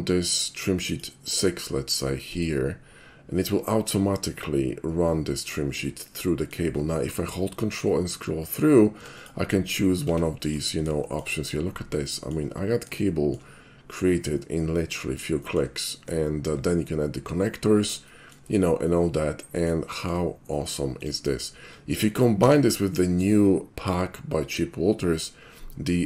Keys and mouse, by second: 0.9 click, 2.2 click, 2.8-4.4 middle drag, 4.4 click, 4.7 click, 4.9 click, 5.1 click, 5.5 click, 5.6 shift+middle click, 6.2 shift+middle click, 9.2 ctrl+click, 10.2 Tab, 10.5 click, 11.5 shift+middle click, 12.3 shift+middle click, 12.7-13.1 shift+middle drag, 13.4-14.0 shift+middle drag, 14.4-15.2 shift+middle drag, 15.4 shift+middle click, 15.8 shift+middle click, 17.7 shift+middle click, 18.1 shift+middle drag, 18.9-19.3 shift+middle drag, 19.4-19.7 shift+middle drag, 19.9 shift+middle drag, 21.0 shift+click, 24.9 q.